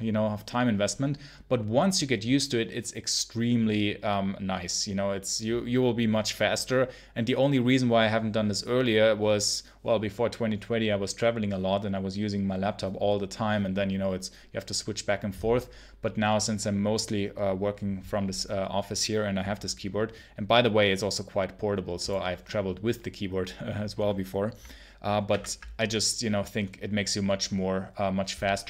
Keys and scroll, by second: 25.2 super+1.